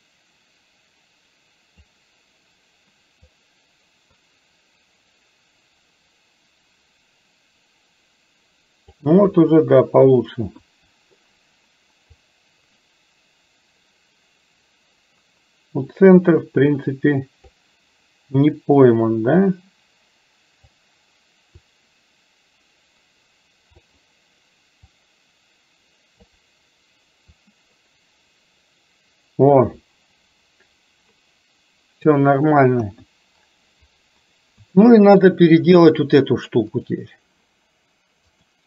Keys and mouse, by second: 3.3-9.1 drag, 9.3 KP_1, 10.7 KP_1, 12.3-17.7 drag, 19.2-20.8 drag, 21.7-23.9 drag, 25.2-26.4 drag, 27.4-32.2 drag, 32.9 KP_1, 34.8 middle click, 38.3-38.6 drag.